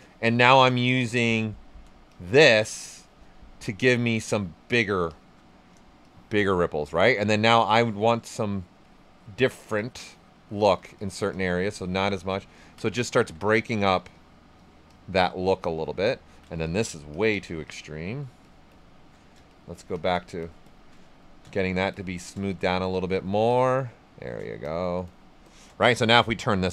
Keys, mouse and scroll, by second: 3.3 right click, 4.3 shift+click, 5.5 right click, 6.0 shift+click, 7.0 shift+right click, 9.1 shift+click, 12.4 ctrl+shift+right click, 15.1 shift+click, 15.2 right click, 15.8 alt+right click, 16.2 ctrl+right click, 16.6 shift+click, 19.1 shift+right click, 19.4 shift+click, 21.0 shift+right click, 23.1 shift+click, 23.8 right click, 24.6 shift+click, 26.1 click, 26.6 right click.